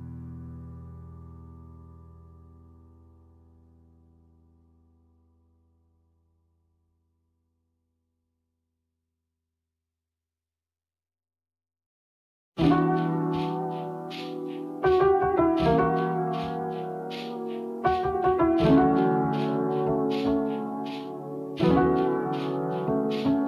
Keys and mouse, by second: 0.0 shift+middle click, 1.4-4.5 ctrl+z, 4.8 middle click, 6.0 shift+middle click, 7.0 shift+middle click, 7.6 Tab, 8.5 Tab, 8.5 a, 9.3-10.4 drag, 10.4 a, 11.4 click, 11.5 middle click, 14.1 middle click, 15.5 click, 16.1-22.3 drag, 22.7 middle click.